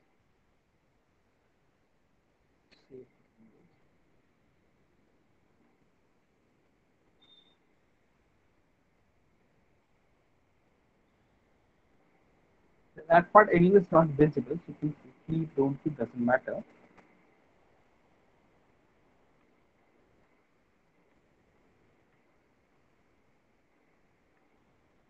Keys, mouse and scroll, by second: 0.1 Delete, 1.7 click, 2.8 Delete, 5.2 Delete, 5.3 middle click, 5.6 alt+middle click, 6.1 middle click, 6.7 alt+middle click, 7.8 click, 8.7 Delete, 10.4 click, 11.9 Delete, 14.6 ctrl+z, 15.3 alt+middle click, 15.6 middle click, 16.1 alt+middle click, 16.6 Delete, 17.5 click, 17.7 Delete, 18.5 click, 18.8 Delete, 19.4 click, 19.6 Delete, 20.2 click, 20.3 Delete, 22.0 click, 22.2 Delete, 23.7 click, 23.8 Delete, 24.3 click, 24.5 Delete.